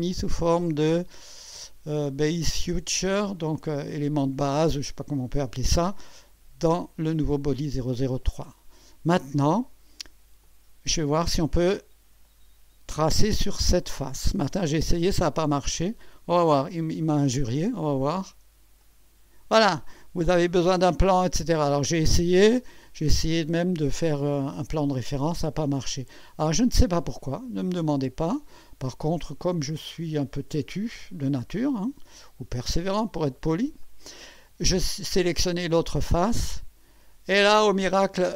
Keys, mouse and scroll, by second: 6.3 click, 8.5-10.3 drag, 10.4 click, 11.6-12.3 scroll up 1, 12.3 right click, 14.1 scroll up 1, 16.0 click, 18.8 click, 23.5 click, 26.3 click, 27.2-28.5 drag, 29.5-31.4 drag, 33.8 click, 36.5 click, 37.7-38.0 scroll down 1.